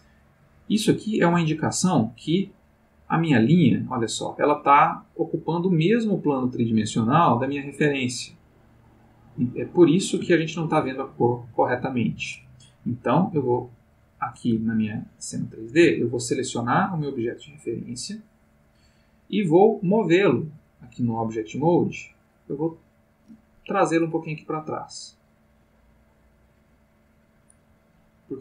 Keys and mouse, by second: 0.8 ctrl+middle click, 2.1-3.4 middle drag, 3.6-12.2 middle drag, 13.9-16.0 middle drag, 17.0 click, 20.0 click, 20.9 click, 22.0 click, 22.6 middle click, 24.1-27.6 drag.